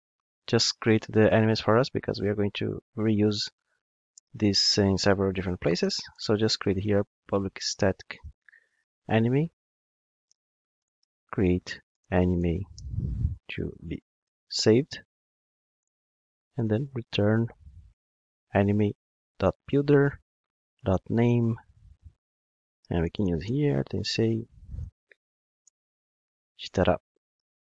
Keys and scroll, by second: 3.4 Tab, 9.5 Return, 18.3 Return.